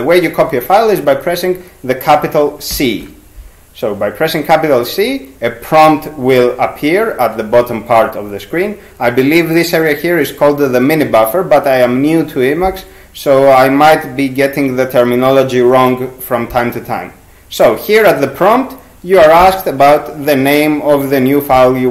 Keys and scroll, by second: 2.7 shift+c.